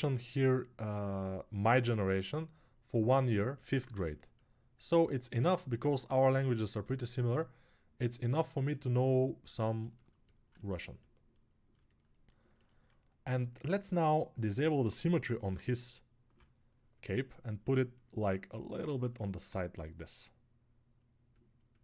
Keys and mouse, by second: 10.7 right click, 11.5-12.5 alt+shift+drag, 12.5-18.5 right drag.